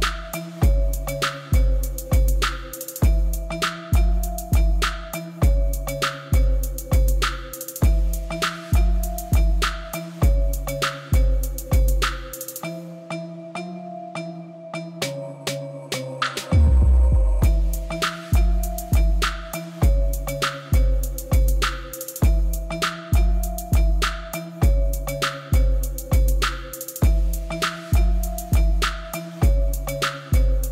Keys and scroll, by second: 2.6 g, 3.0 y, 5.2 Tab, 7.4 g, 7.8 z, 14.0 ctrl+b, 19.5 shift+z, 20.7 1, 22.8 shift+z, 23.2 g, 24.0 z, 27.8 Tab.